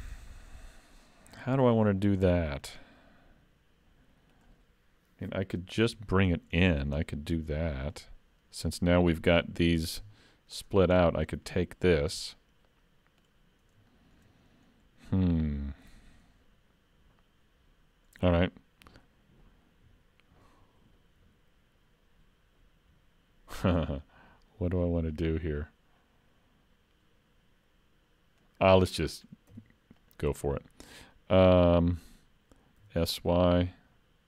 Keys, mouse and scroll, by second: 2.3 shift+middle click, 6.4 scroll up 2, 6.6 shift+middle click, 7.0 middle click, 10.0 alt+3, 10.6 alt+click, 11.0-12.6 scroll down 2, 11.3 middle click, 13.9 shift+middle click, 24.1 middle click, 29.5 e, 32.8 s.